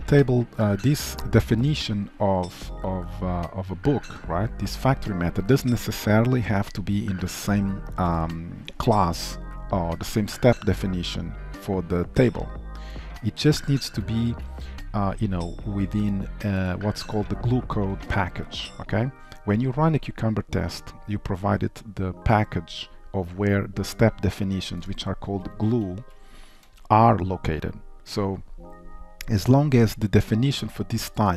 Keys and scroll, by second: 14.4 alt+1, 26.0 shift+Down, 26.7 Up.